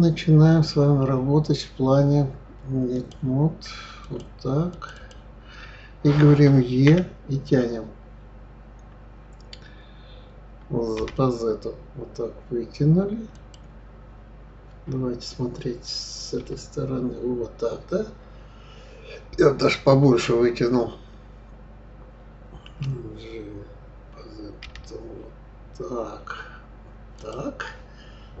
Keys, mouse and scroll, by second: 4.0 click, 4.7 click, 6.9 e, 16.4 KP_1, 22.7 g.